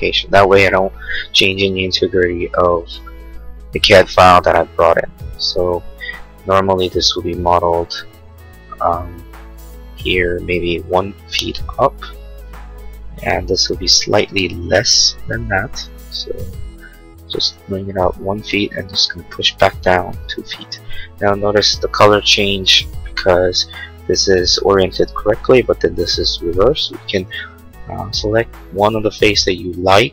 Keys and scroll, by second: 6.9 p, 11.1 ', 11.5 Return, 20.3 2, 20.7 Return, 24.2 space.